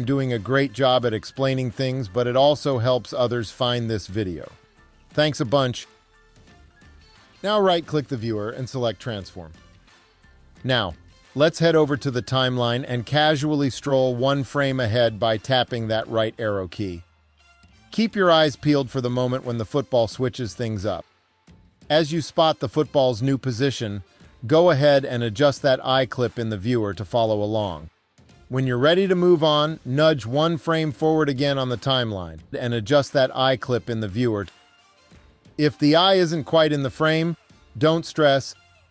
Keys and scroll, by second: 16.3 Right, 18.1 Right, 30.1 Right, 33.7 Right.